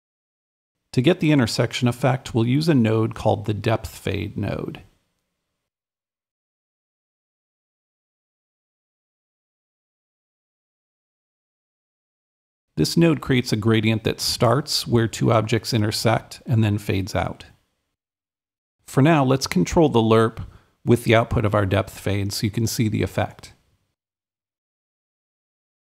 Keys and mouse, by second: 0.0-2.1 super+right drag, 4.5-6.8 right drag, 6.9-7.9 right drag, 7.5-8.7 typing, 7.9 click, 8.0 right click, 10.8-12.7 drag, 12.7-15.7 drag, 18.2-19.5 drag, 19.6-25.8 drag.